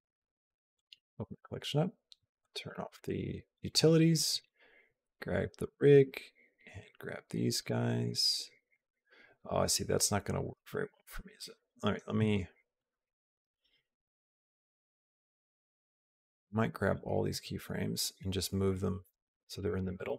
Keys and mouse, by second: 0.6 click, 2.2 click, 5.8 g, 8.0 g, 12.1 shift+click, 12.7 shift+click, 16.0 click, 17.2 g.